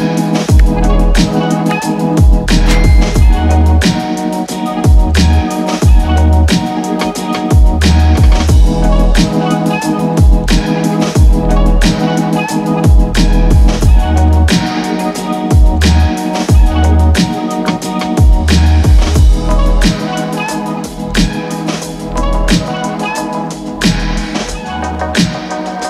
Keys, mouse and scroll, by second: 1.1-1.6 scroll down 1, 1.6 middle click, 2.8 click, 13.9-19.5 drag, 24.1 click, 24.2-25.8 drag.